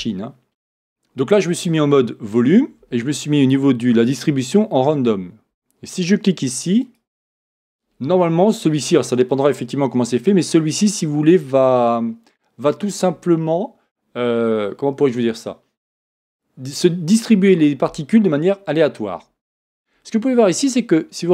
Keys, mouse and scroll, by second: 0.0 Return, 0.4-6.8 middle drag, 0.4-3.5 scroll up 2, 6.8-18.9 drag.